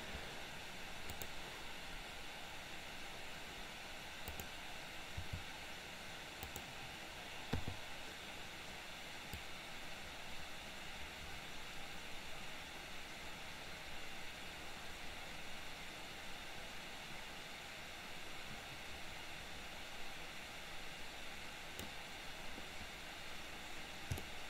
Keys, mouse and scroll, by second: 1.2 click, 4.4 click, 5.2 r, 7.6 i, 9.6-22.1 drag, 24.3-24.4 shift+middle drag.